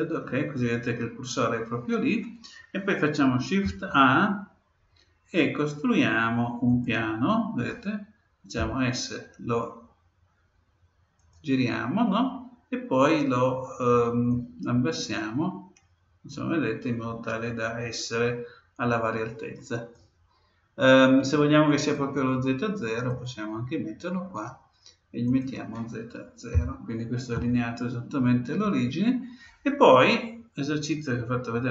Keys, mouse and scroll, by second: 3.6 shift+a, 8.5 s, 14.2-16.1 drag, 21.9-23.7 drag, 25.2-27.1 drag.